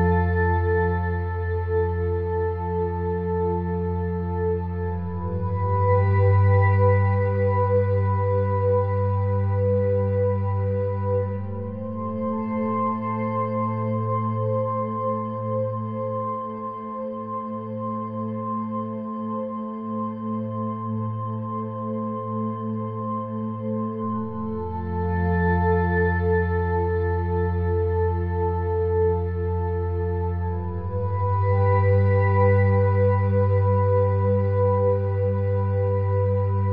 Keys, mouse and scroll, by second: 0.3 Tab, 3.0 click, 3.9 ctrl+g, 5.2 shift+d, 6.6 shift+d, 7.0 click, 8.3 s, 9.7 middle click, 10.3 click, 10.9-11.2 scroll up 1, 11.2-12.4 middle drag, 12.6 scroll up 1, 13.2 middle click, 15.9 Tab, 16.3 middle click, 16.7-17.8 middle drag, 18.5 click, 19.7 click, 20.2 middle click, 20.9 shift+d, 21.3 p, 21.9 Tab, 22.0 click, 22.8 Tab, 23.2 ctrl+r, 25.2 a, 25.6-26.7 drag, 26.1 middle click, 26.9 ctrl+z, 27.6 middle click, 28.6 ctrl+r, 29.8 ctrl+r, 30.4 middle click, 30.8 Tab, 31.2 click, 32.0 Tab, 32.7-36.3 drag, 36.3 s.